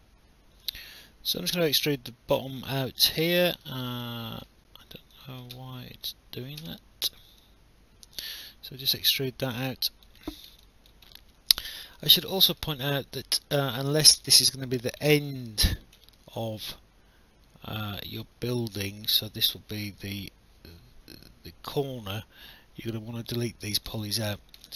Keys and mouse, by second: 1.7 click, 3.3 ctrl+z, 4.0 alt+click, 5.1 click, 6.6 w, 7.4 click, 9.1 alt+click, 10.6 alt+click, 11.1 alt+middle click, 12.0 alt+click, 12.8 alt+middle click, 13.2 alt+click, 15.1 alt+middle click, 16.4 alt+click, 23.9 alt+click.